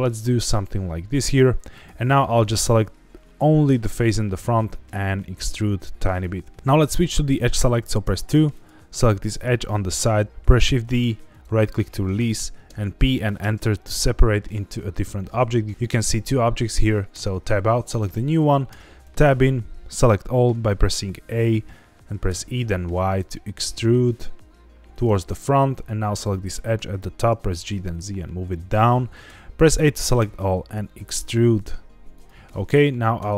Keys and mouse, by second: 0.0 click, 0.4 middle click, 4.3 e, 6.1 click, 8.0 2, 8.5 click, 10.3 ctrl+z, 10.3 shift+d, 10.5 shift+d, 11.3 right click, 12.6 p, 17.1 Tab, 18.6 Tab, 19.0 a, 22.2 e, 22.5 y, 24.9 click, 27.3 g, 27.5 z, 28.7 click, 29.2 a, 30.1 e, 32.1 click.